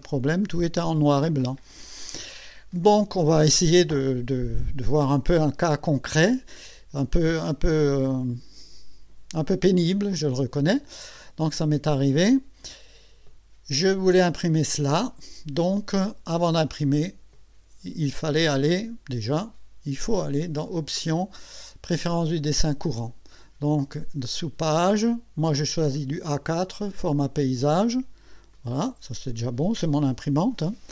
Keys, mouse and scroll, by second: 0.0 middle click, 20.6 click, 22.1 click, 28.5 click.